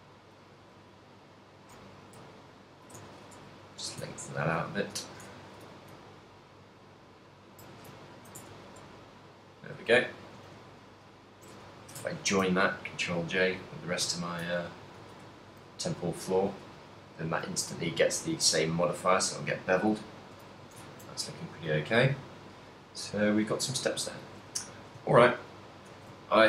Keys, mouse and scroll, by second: 0.5 g, 2.9 ctrl+click, 3.0 a, 3.4 Tab, 3.6 right click, 4.1 Tab, 4.5 a, 5.1 l, 5.7 g, 7.5 ctrl+click, 7.9 z, 8.5 Tab, 8.9 middle click, 10.2 shift+right click, 11.3 ctrl+j, 11.9 a, 12.3 ctrl+middle click, 12.7 middle click, 14.4 ctrl+middle click, 14.8 middle click, 15.2 a, 15.4 shift+middle click, 16.0 right click, 16.2 right click, 17.1 right click, 17.6 right click, 20.2 middle click, 20.7 a, 21.0 ctrl+middle click, 21.4 middle click, 22.4 middle click, 22.9 ctrl+middle click, 23.6 middle click, 24.8 shift+middle click, 25.4 shift+middle click, 25.6 middle click, 26.1 a, 26.4 shift+middle click.